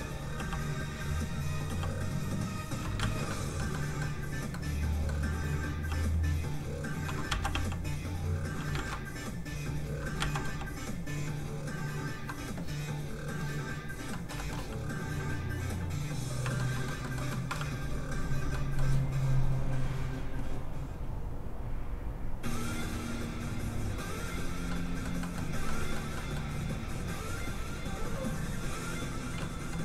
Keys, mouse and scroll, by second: 0.0-1.6 typing, 0.5 click, 1.4 click, 1.8 click, 3.0 ctrl+z, 5.8 middle click, 5.8 f, 6.0 click, 7.3 ctrl+z, 7.5 f, 7.7 click, 8.7 ctrl+z, 9.6 click, 9.7 click, 10.2 ctrl+z, 10.4 f, 10.7 click, 14.1 middle click, 14.3 shift+middle click, 15.4 middle click, 16.1 click, 16.5 shift+middle click, 16.7 middle click, 16.8 middle click, 17.9 f, 18.3 click, 18.5 middle click, 19.6 click, 24.7 middle click, 25.9 scroll up 1, 26.1 middle click, 27.5 click, 29.4 middle click.